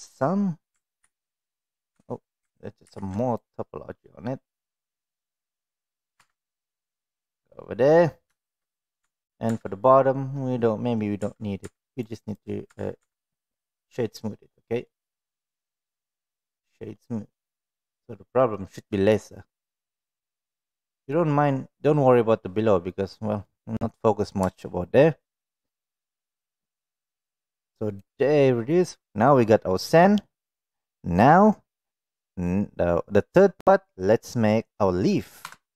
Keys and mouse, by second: 1.0 ctrl+r, 1.9 Tab, 2.8 ctrl+r, 5.6 middle click, 6.1 Tab, 6.5-7.9 middle drag, 8.4 shift+middle click, 9.0 Tab, 12.4-13.9 right drag, 14.5-14.8 middle drag, 15.1 click, 15.5 click, 16.9-18.4 middle drag, 20.0-21.1 middle drag, 23.0-23.4 middle drag, 25.7 click, 27.9 click, 28.7-30.2 middle drag, 35.4 KP_1.